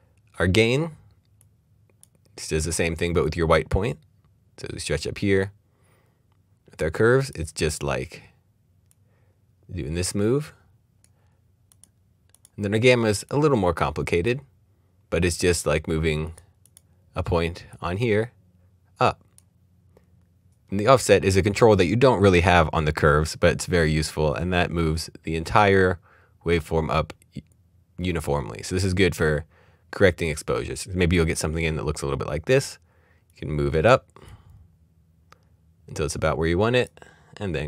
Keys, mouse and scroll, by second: 1.4 click, 16.2 click, 24.8 click, 32.5 click, 33.3 click.